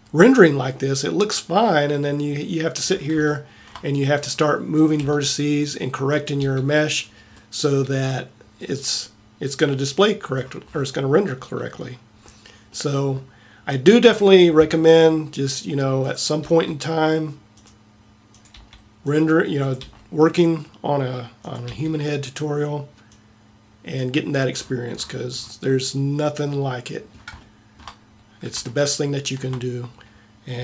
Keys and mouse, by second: 2.8-4.9 middle drag, 5.1 g, 6.4 g, 9.7-12.7 middle drag, 14.3-15.5 middle drag, 16.4 g, 18.6 g, 19.9 g, 21.7 g, 26.2-30.6 middle drag.